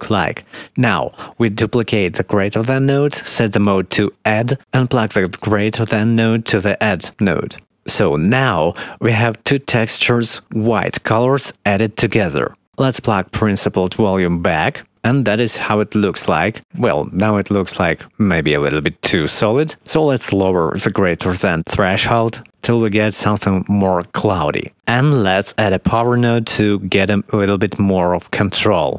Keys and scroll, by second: 1.9 shift+d, 26.7 shift+d.